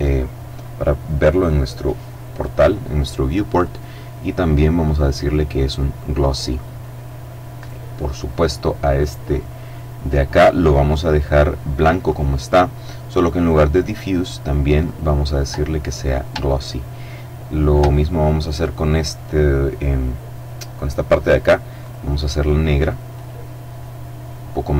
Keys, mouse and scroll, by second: 2.8 click, 4.9 click, 6.9 right click, 11.3 click, 12.7 click, 14.1 click, 16.0-17.5 shift+middle drag, 18.1 right click, 21.1 click, 22.4 click, 24.0 click.